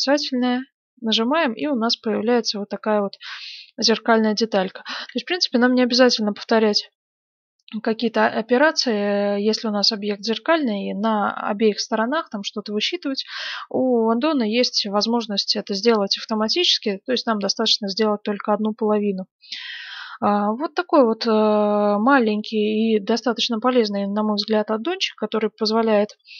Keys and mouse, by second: 0.4-2.6 drag, 2.6-4.4 middle drag, 5.2-17.6 middle drag, 19.3-26.3 middle drag.